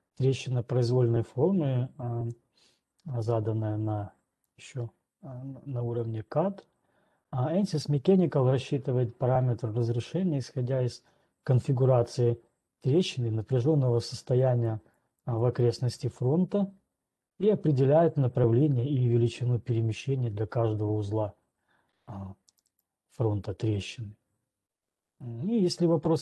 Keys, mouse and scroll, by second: 4.9 click, 14.9 click, 15.4 click, 15.9 click, 16.4 click, 23.2 click, 23.2 scroll, 23.9 right click, 24.8 alt+Tab, 24.8-26.2 scroll.